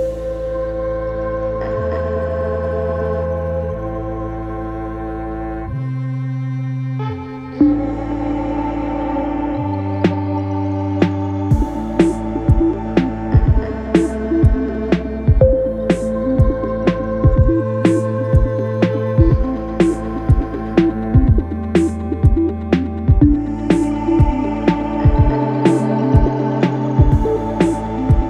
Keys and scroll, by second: 4.3 4, 7.1 2, 11.3 ], 14.1 ], 18.3 ctrl+z, 22.0 4, 24.2 3, 26.0 4.